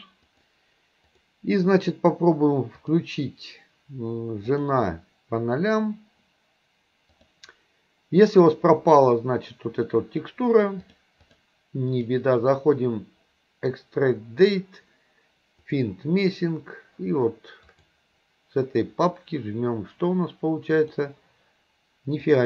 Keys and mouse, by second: 2.8-5.1 drag, 7.2-8.2 drag, 10.8-11.5 drag, 11.9-16.0 drag, 20.8 click.